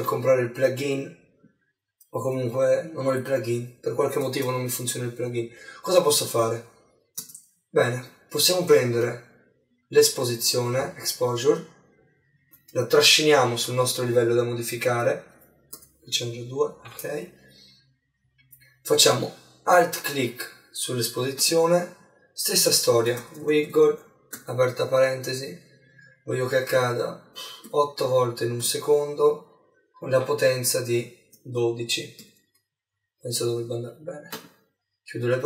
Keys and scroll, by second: 24.4 shift+9, 32.3 shift+0.